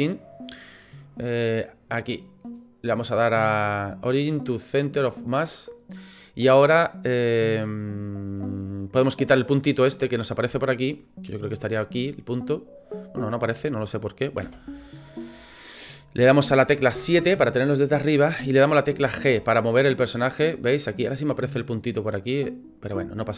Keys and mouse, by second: 8.8 click, 9.5 click, 9.9 click, 12.3 click, 13.0-13.4 drag, 14.4 a, 16.9 KP_7, 19.0 g, 21.6 click, 22.1 click.